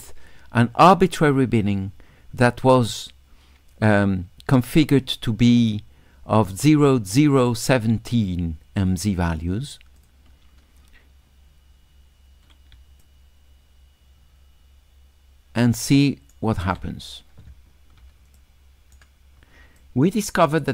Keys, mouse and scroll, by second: 10.0 click, 12.8 s, 13.0-16.3 drag, 18.4 shift+click, 18.6 shift+right click, 18.7 shift+click, 19.8 shift+click.